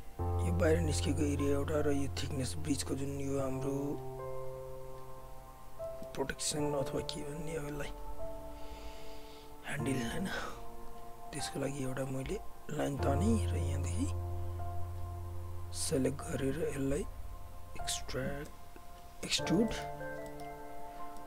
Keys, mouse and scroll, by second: 6.0 alt+middle click, 6.7 alt+right click, 7.9 alt+click, 10.3 w, 10.7 alt+right click, 10.9 alt+click, 12.2 right click, 13.1 click, 15.9 alt+right click, 16.1 alt+click, 18.5 space, 19.7 alt+middle click, 20.0 alt+right click, 20.3 alt+middle click, 20.5 alt+right click, 21.2 alt+middle click.